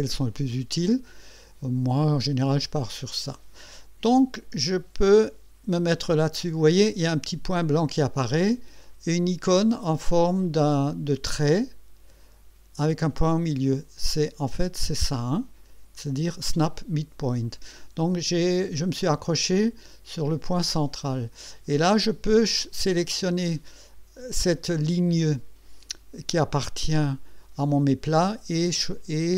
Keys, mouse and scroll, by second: 13.4 click.